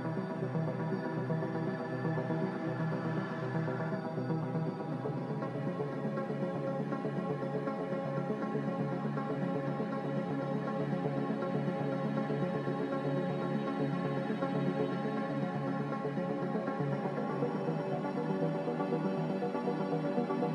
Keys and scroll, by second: 8.9 b, 12.0 b, 13.9 n, 17.5 a.